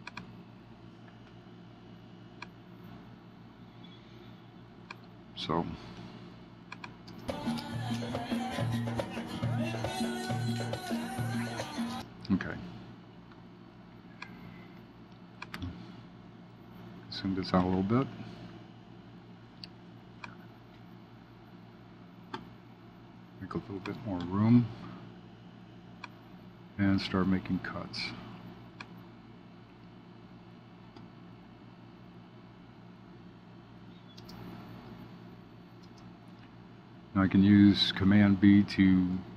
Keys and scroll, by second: 16.4 shift+z.